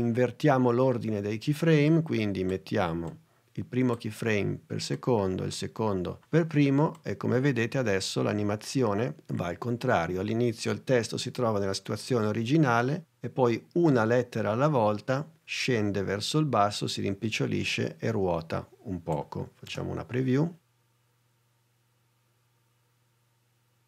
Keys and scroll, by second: 19.7 space.